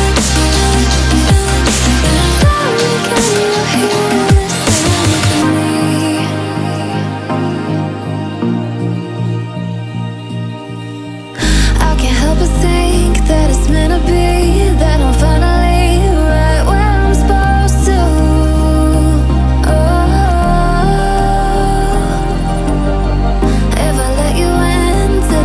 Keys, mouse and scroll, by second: 2.8 click, 4.5 alt+scroll down 1, 4.7 click, 5.0 alt+scroll up 1, 5.6 click, 7.1 click, 9.5 click, 10.2-10.9 alt+scroll up 2, 11.2-12.5 drag, 12.6-13.2 drag, 13.3 alt+scroll down 2, 13.8 click, 14.2-15.0 alt+scroll up 2, 15.0 click, 18.7-19.5 alt+scroll up 2, 19.5-20.2 alt+scroll up 1, 20.2 click, 23.4-25.4 typing.